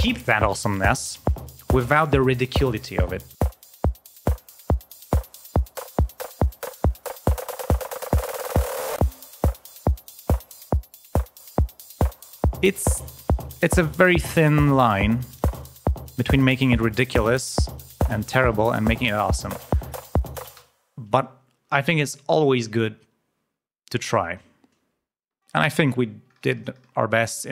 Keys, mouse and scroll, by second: 4.0 click, 7.7 click, 10.5 click, 11.3 click, 12.0 click, 13.3 click, 13.8-14.9 drag, 15.2 click, 16.0 click, 19.9-20.9 drag, 20.9 space, 25.3 click, 25.9 ctrl+scroll down 2.